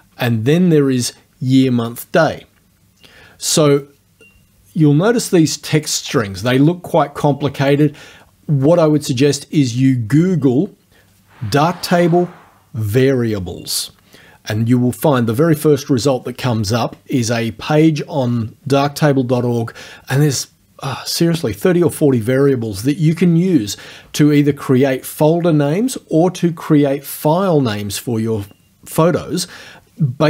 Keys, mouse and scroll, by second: 5.9 click, 7.7 click.